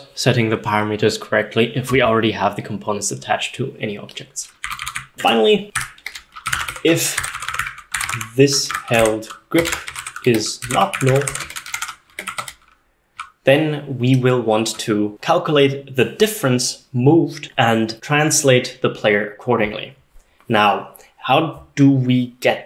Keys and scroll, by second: 4.7-12.9 typing, 8.8 Tab, 12.2 Escape, 14.9-15.6 typing.